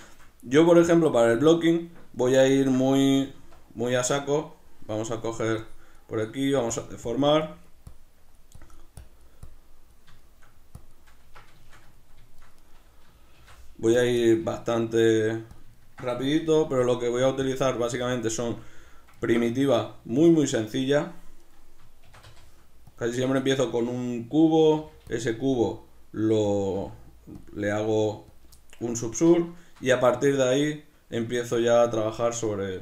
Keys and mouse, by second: 0.7-2.1 right drag, 2.1-5.7 shift+middle drag, 3.3 Tab, 3.5 b, 5.7 click, 10.2 shift+middle click, 10.8 click, 11.3 b, 11.3 Tab, 11.3 click, 11.6-12.6 shift+middle drag, 12.6 right click, 13.4 shift+d, 14.1 click, 14.2-15.6 shift+middle drag, 14.5 s, 15.6 click, 15.7-16.9 ctrl+middle drag, 16.4 g, 16.9 click, 17.0 s, 17.5 click, 17.6 g, 18.2 click, 18.4-21.4 shift+middle drag, 21.4 right click, 22.0 shift+d, 23.0 click, 23.2-25.2 ctrl+shift+middle drag, 24.7 g, 25.2 click, 25.4 s, 26.5 click, 26.7 g, 27.5 click, 27.7 s, 28.4 click, 28.5-32.8 shift+middle drag.